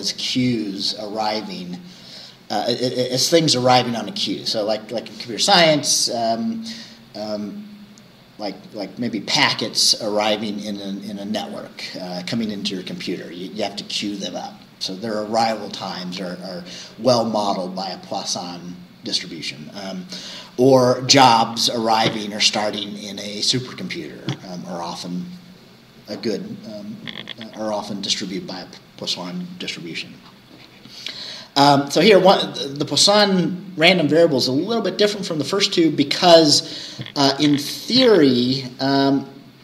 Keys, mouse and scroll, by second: 3.8-8.1 scroll up 1, 8.1-12.3 scroll up 1, 12.3-16.6 scroll up 1, 16.6-20.9 scroll up 1, 20.9-25.1 scroll up 1, 25.1-29.4 scroll up 1, 29.4-33.7 scroll up 1, 33.7-37.9 scroll up 1, 37.9-39.6 scroll up 1.